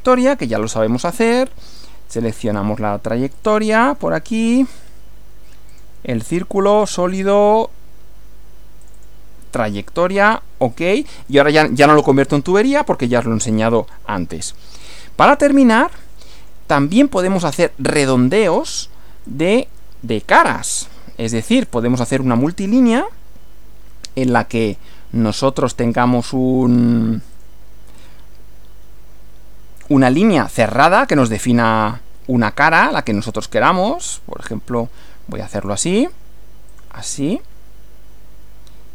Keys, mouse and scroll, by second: 2.4 click, 3.4 click, 4.7 click, 5.8 click, 6.7 click, 8.8 click, 10.2 click, 11.4-12.2 middle drag, 13.2 middle click, 14.6 shift+middle click, 15.8 middle click, 17.6 shift+middle click, 18.6 click, 19.2 click, 21.5 click, 24.7 click, 27.4 click, 31.2 click, 33.1 click, 35.6 click, 36.7 click.